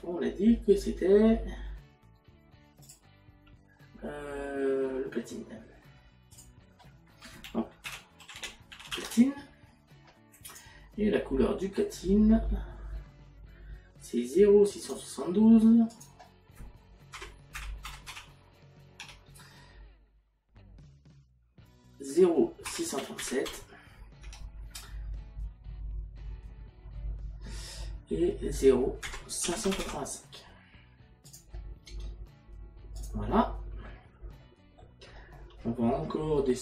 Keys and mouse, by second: 2.9 click, 6.4 click, 9.0 n, 10.5 click, 14.9 click, 15.9 click, 17.2 KP_Decimal, 19.0 KP_2, 22.7 KP_Decimal, 24.2 Tab, 29.1 KP_Decimal, 31.3 click, 33.0 click.